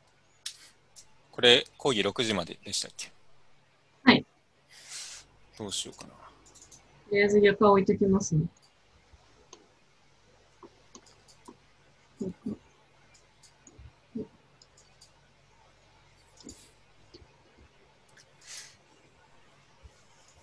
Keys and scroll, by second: 1.9 u, 18.8 u.